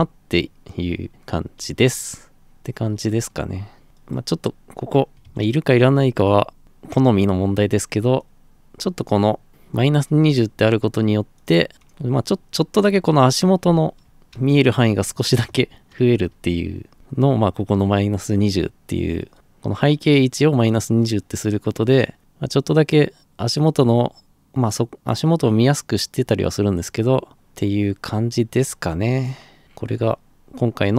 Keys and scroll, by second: 2.3 Escape, 5.1 ctrl+c, 5.2 ctrl+v, 13.4-16.1 typing, 16.9 Escape.